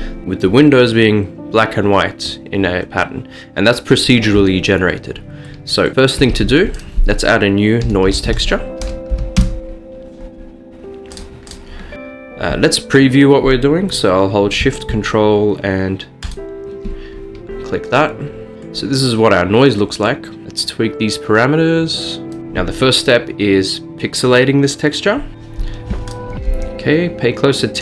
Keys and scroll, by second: 6.3 a, 7.9-9.2 typing, 9.4 Return, 14.9 typing, 15.9 typing, 25.3 ctrl+alt+shift+F11.